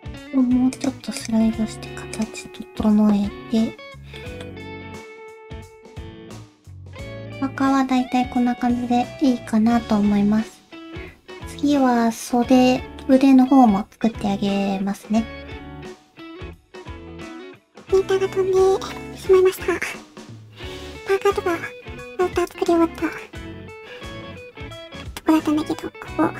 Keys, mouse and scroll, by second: 1.2 click, 1.4 g, 2.5 scroll down 1, 2.6 middle click.